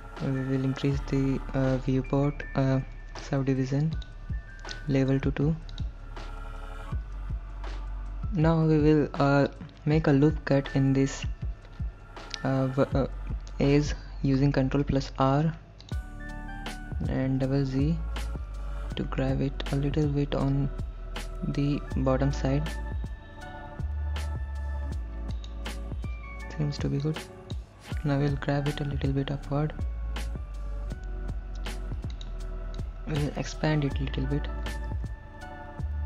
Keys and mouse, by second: 4.0 click, 7.3 ctrl+z, 14.8 ctrl+r, 17.1 g, 17.4 g, 25.4 click, 27.2 click, 28.4 g, 29.4 z, 32.1 click, 32.8 click, 34.9 ctrl+a.